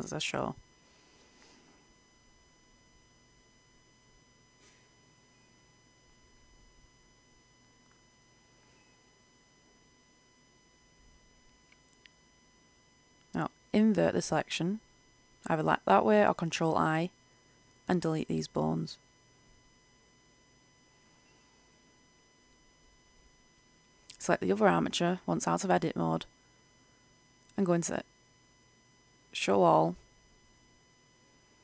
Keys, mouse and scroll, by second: 0.4-5.0 drag, 5.0 right click, 5.7-7.8 middle drag, 11.0 click, 16.5-18.2 scroll down 1, 18.2 Delete, 20.4 Return, 24.1 Tab, 25.3 right click, 29.0 click.